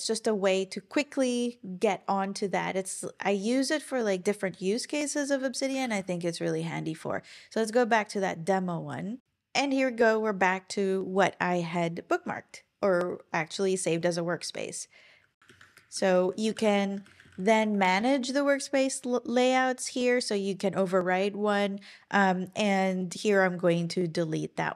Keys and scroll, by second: 5.8 super+l, 15.5 ctrl+super+l, 15.9 super+p, 16.1-17.6 typing.